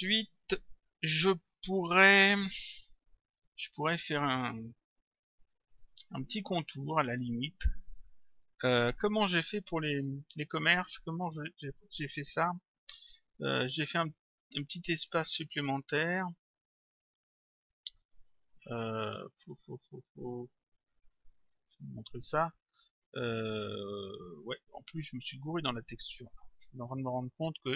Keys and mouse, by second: 11.0 click, 17.7 click, 21.2 click.